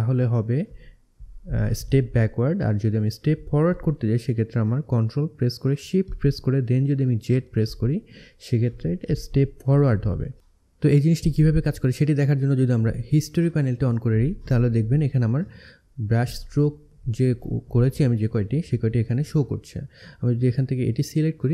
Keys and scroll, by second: 4.8 ctrl+shift+z.